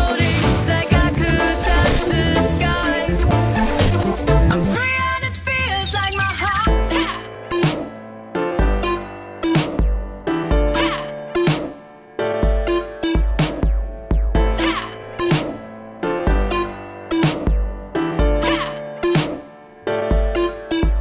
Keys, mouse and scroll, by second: 3.1 right click, 3.5-6.2 drag, 6.2-7.9 right drag, 7.9-11.6 drag, 13.9 middle click, 13.9-14.4 scroll up 9, 14.4-15.5 scroll down 27, 15.5 x, 17.3 click, 17.7 right click, 17.7 click, 17.9 right click, 17.9 click, 18.1 right click, 20.2-21.0 drag.